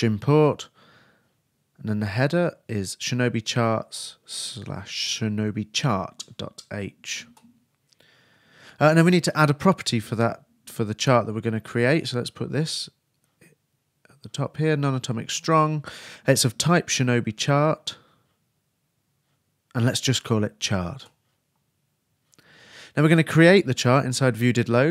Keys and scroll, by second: 2.8 shift+Return, 2.9 shift+s, 3.6 shift+h, 5.7 shift+Return, 5.9 shift+s, 6.2 shift+h, 9.8 shift+2, 10.3 shift+o, 12.1-13.2 typing, 17.2 shift+s, 18.0 shift+h, 20.2-21.4 typing.